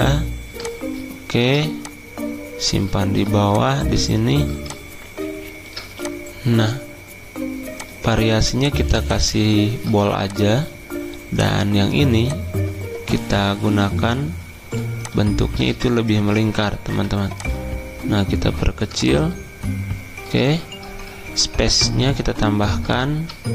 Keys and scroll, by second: 14.6 c, 16.1 Escape, 16.9 v, 22.1 alt+Right, 22.3 alt+Right.